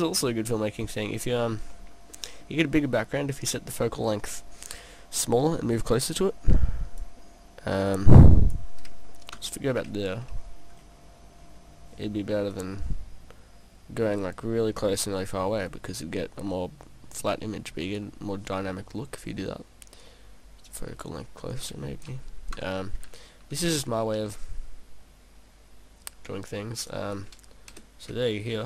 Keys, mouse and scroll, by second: 0.2 middle click, 1.1-1.7 scroll down 2, 5.8 click, 7.9 click, 9.4 KP_0, 10.4-10.9 scroll up 4, 12.6 click, 18.8 middle click, 20.1 click, 21.5 click, 22.6 KP_0, 24.1 KP_0, 24.2 g, 26.9 click, 27.7 click.